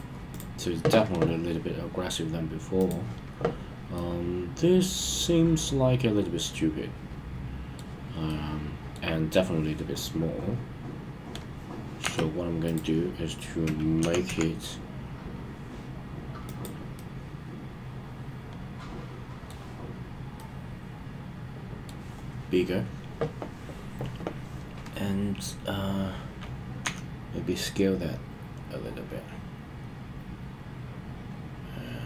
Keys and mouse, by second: 0.2 click, 2.7 click, 3.9-7.8 middle drag, 8.2 middle click, 12.0 Tab, 12.6 click, 13.9 g, 14.2 z, 16.4 click, 16.9-19.5 middle drag, 20.3-21.9 middle drag, 26.8 s.